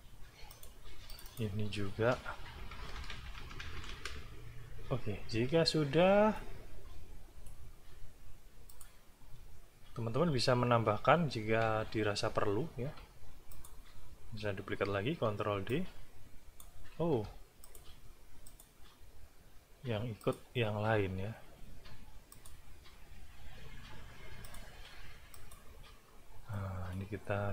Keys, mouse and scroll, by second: 0.5 click, 1.1 click, 2.3-4.3 typing, 4.6 click, 6.3-7.6 drag, 8.7 click, 9.5 ctrl+scroll up 1, 10.5 ctrl+scroll up 1, 11.1 ctrl+scroll down 1, 12.5 ctrl+scroll up 1, 12.7-13.4 ctrl+scroll down 1, 13.5 click, 14.2-14.5 ctrl+scroll down 2, 14.9 ctrl+d, 15.7 ctrl+click, 16.9 ctrl+z, 17.6 ctrl+click, 18.5 click, 20.2 click, 21.3-21.9 scroll down 4, 22.3 click, 24.4 click, 25.3 click, 26.5 click.